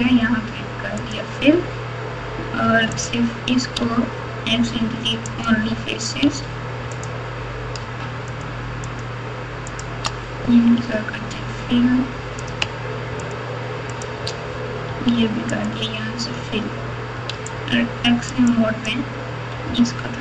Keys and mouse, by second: 1.0 click, 2.6 3, 2.9 click, 3.8 x, 6.2 1, 6.9 click, 8.3 shift+click, 8.8 shift+click, 9.7 shift+click, 10.7 f, 12.4 click, 13.2 shift+click, 13.9 shift+click, 14.8 f, 17.3 alt+z, 18.5 click, 19.6 g.